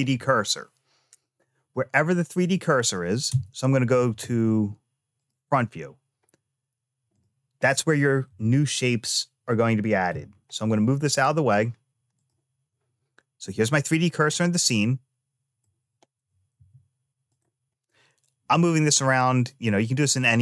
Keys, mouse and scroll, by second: 3.1 `, 6.9-8.0 drag, 8.0 g, 14.2-16.0 middle drag, 16.0 g, 17.6-19.6 middle drag.